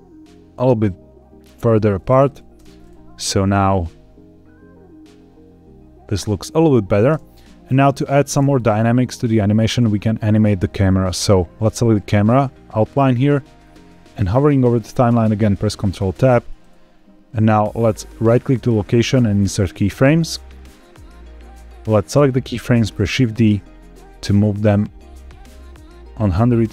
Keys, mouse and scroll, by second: 1.5 click, 2.1 click, 2.5 space, 7.0 space, 7.6 click, 8.2 space, 8.5-9.3 drag, 11.1 click, 15.8 ctrl+Tab, 18.1-19.4 right drag, 21.9 click, 22.9 shift+d.